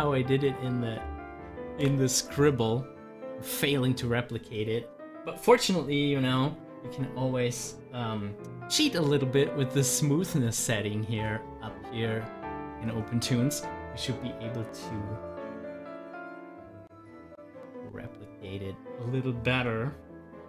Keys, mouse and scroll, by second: 1.7 ctrl+z, 9.2-15.3 drag.